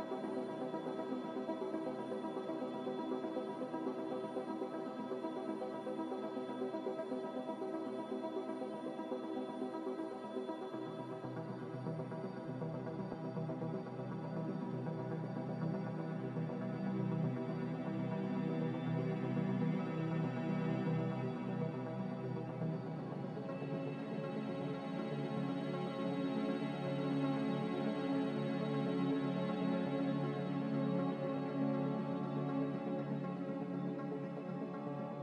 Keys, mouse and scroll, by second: 0.0-0.6 typing, 2.9 Num_Lock, 4.6 ).